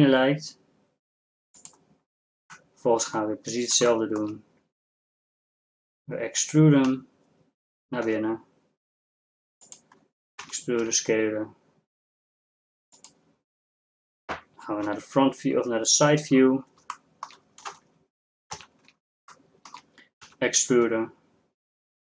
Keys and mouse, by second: 4.3-6.9 middle drag, 6.9 e, 10.5 e, 15.1 KP_3, 17.6 middle click, 18.6 z, 20.4 e.